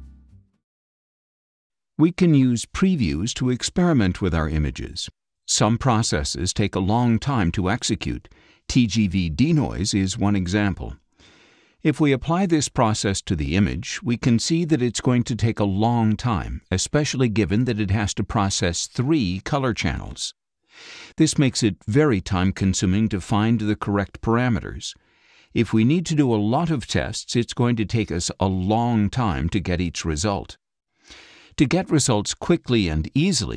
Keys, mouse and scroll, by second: 6.2 click, 8.9-10.2 drag, 11.2-12.5 drag, 29.9 click, 31.5 click, 32.8 click, 33.0 click.